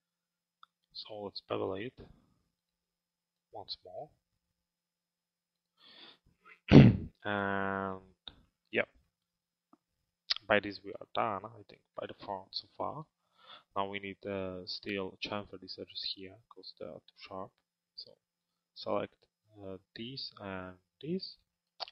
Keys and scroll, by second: 10.6 p, 12.0 alt+x.